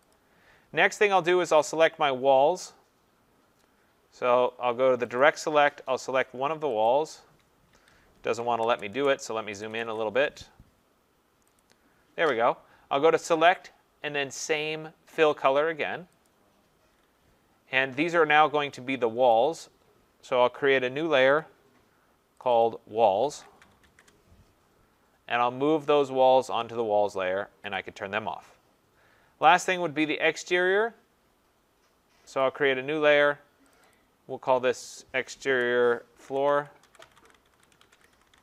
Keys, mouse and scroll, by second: 0.1 click, 4.5 click, 5.2 click, 7.7 Escape, 8.6 ctrl+BackSpace, 8.9 ctrl+BackSpace, 9.5 ctrl+=, 9.7 ctrl+=, 9.9 ctrl+=, 11.6 click, 13.5 click, 16.3 click, 19.1 click, 19.3 click, 21.4 click, 22.4 click, 22.6 click, 22.8 scroll, 23.0-24.3 typing, 26.6 click, 27.7 click, 29.6 click, 32.4 click, 33.7 click, 33.9 click, 36.0-38.4 typing.